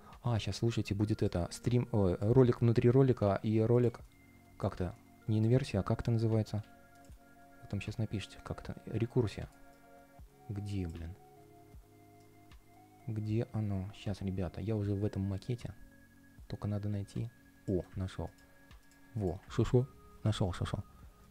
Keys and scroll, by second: 5.8 super+space, 19.3 super+c.